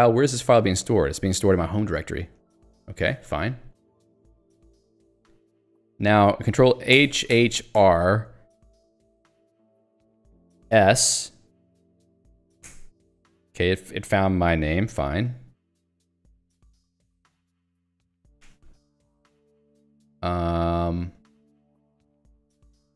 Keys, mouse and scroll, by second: 2.6 q, 3.1 Escape, 4.5 Escape, 5.3 scroll down 1, 7.8 r, 10.7 s, 11.8-12.9 typing, 15.9 j, 17.0 Escape, 17.5 ctrl+g, 17.9 Escape.